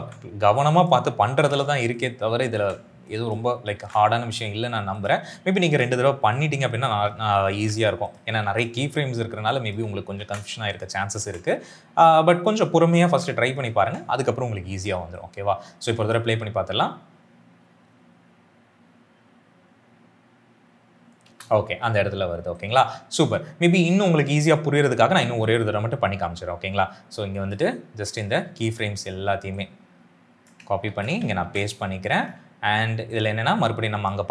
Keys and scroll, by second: 1.2 ctrl+c, 2.4 ctrl+v, 3.6 ctrl+c, 5.5 ctrl+v, 7.4 ctrl+c, 8.3 ctrl+v, 10.1 ctrl+c, 11.1 ctrl+v, 12.9 ctrl+c, 13.7 ctrl+v, 16.1 space, 21.1 space, 30.8 ctrl+c, 31.3 ctrl+v.